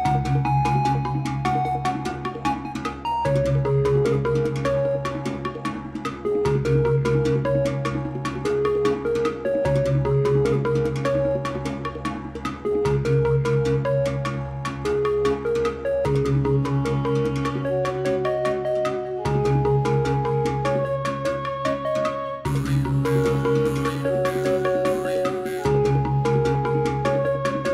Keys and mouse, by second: 10.5-27.7 drag.